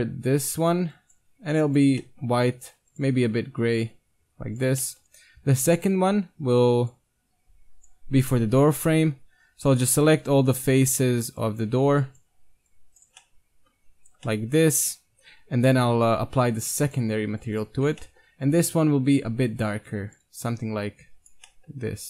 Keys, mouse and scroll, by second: 2.1 middle drag, 2.2-4.7 drag, 4.8-5.6 scroll up 1, 5.6-6.8 middle drag, 6.1-7.4 drag, 6.2 Tab, 6.8 right click, 8.6 KP_1, 10.2 z, 10.6 c, 13.0-14.8 drag, 13.1 z, 14.0 right click, 14.5-16.2 middle drag, 15.5 click, 15.5 right click, 16.9-17.9 drag, 17.9 Tab, 18.0 click, 18.0-19.4 middle drag, 21.5 middle click.